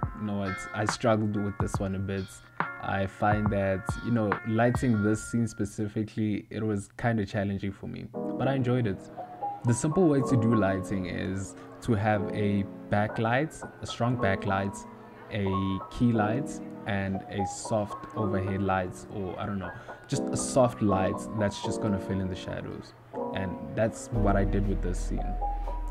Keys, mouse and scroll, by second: 0.8 click, 1.3 KP_0, 2.1 click, 2.4 KP_0, 2.9 click, 4.3 g, 5.2 KP_1, 6.7 n, 6.9 click, 7.2 n, 7.5 click, 7.7 click, 8.0 click, 8.4 ctrl+middle click, 9.2 r, 9.9 KP_Add, 10.5 KP_7, 10.9 ctrl+middle click, 11.2 g, 11.9 g, 12.1 click, 12.3 click, 13.5 click, 14.5 click, 15.8 ctrl+middle click, 23.0 click.